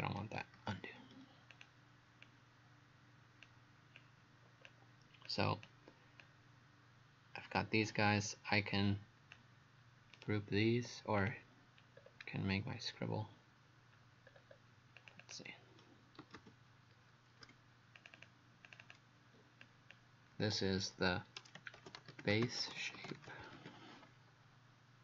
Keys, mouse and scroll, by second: 0.6 ctrl+z, 1.5 click, 10.1 right click, 11.2 click, 12.0-14.3 scroll down 2, 14.3-14.7 scroll up 3, 15.0 click, 15.2 click, 16.0-17.5 typing, 18.0 click, 18.2 click, 18.8 click, 19.6 click, 21.5-24.1 typing.